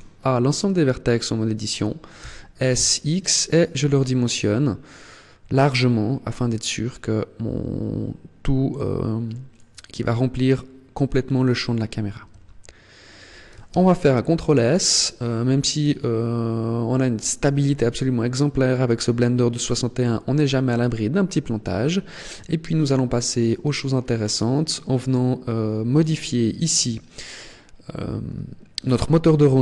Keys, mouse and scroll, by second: 2.0 s, 9.3 click, 12.1 Tab, 13.5 ctrl+s, 23.3 click, 25.7 click.